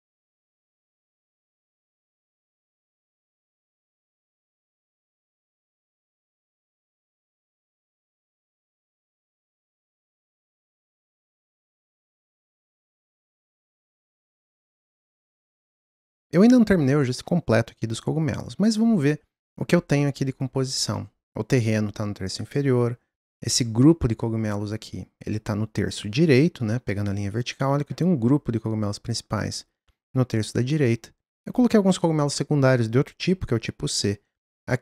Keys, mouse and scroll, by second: 0.8 click, 5.3 middle click, 6.0 click, 7.1 middle click, 7.5 click, 8.6 click, 9.4 click, 9.8-10.4 scroll down 2, 9.9 middle drag, 10.4-34.8 middle drag.